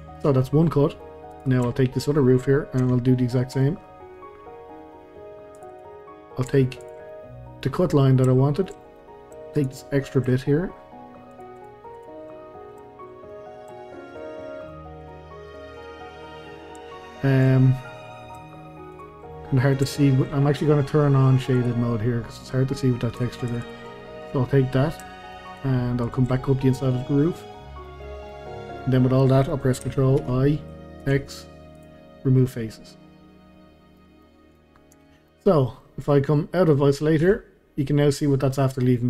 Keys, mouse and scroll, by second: 0.1 drag, 0.4-1.3 middle drag, 1.3 click, 1.7-2.8 shift+middle drag, 2.8 Tab, 3.2-3.9 middle drag, 3.9-4.4 scroll down 2, 4.4-5.5 scroll down 1, 5.5 click, 5.7 click, 6.0 middle click, 6.8 shift+click, 7.1 middle click, 7.6 scroll down 1, 7.8-8.3 scroll up 1, 8.3-9.6 shift+middle drag, 9.6 shift+click, 9.8-11.3 middle drag, 11.3 shift+click, 11.6 shift+click, 11.9 shift+click, 12.3-14.1 middle drag, 14.1 shift+click, 14.4 shift+click, 14.6 shift+click, 15.0 shift+click, 15.5 shift+click, 15.7 shift+click, 16.1-18.9 middle drag, 18.9 shift+click, 19.3-21.6 middle drag, 21.6 click, 22.0-23.5 middle drag, 23.5 shift+click, 23.6 shift+drag, 23.9-25.5 middle drag, 25.5 shift+click, 26.0 shift+click, 26.4-26.7 scroll down 1, 26.7-29.0 middle drag, 29.0-30.2 scroll up 1, 30.2 ctrl+i, 31.0 x, 32.1-32.5 scroll down 1, 32.5-34.9 middle drag, 34.9 Tab, 35.3-37.2 middle drag, 37.2 KP_Divide, 38.2-38.5 scroll up 1, 38.5 scroll down 1, 38.8-39.0 middle drag.